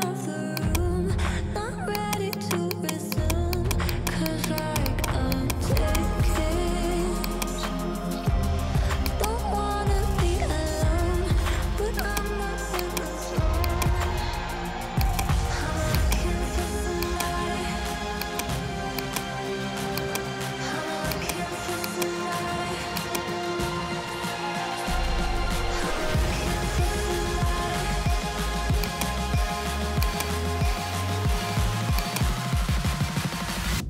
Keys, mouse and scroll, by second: 0.0 click, 0.6 click, 2.0-2.7 typing, 2.0 click, 2.4 click, 2.8 click, 3.2 click, 3.6 click, 4.0 click, 4.3 click, 4.6 click, 5.0 click, 5.4 click, 5.9 click, 6.0 ctrl+c, 6.3 ctrl+d, 6.5 ctrl+d, 6.6 ctrl+d, 6.7 ctrl+d, 7.3 click, 9.2 click, 9.8-10.8 typing, 11.9-12.5 typing, 12.0 click, 12.9 click, 13.7 click, 14.1-14.6 typing, 15.1 click, 16.0 click, 17.1 click, 17.4-18.4 typing, 18.2 click, 19.0 click, 19.7-20.8 typing, 20.0 click, 21.2 click, 22.0 click, 23.0 click, 24.8-26.9 typing, 28.9 click, 32.0-33.2 typing, 32.0 click.